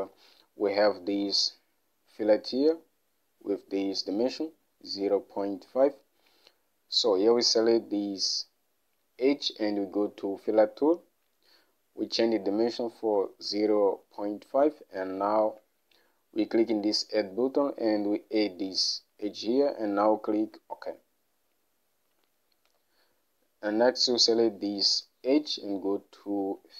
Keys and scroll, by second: 13.0-13.6 typing, 22.8 Home.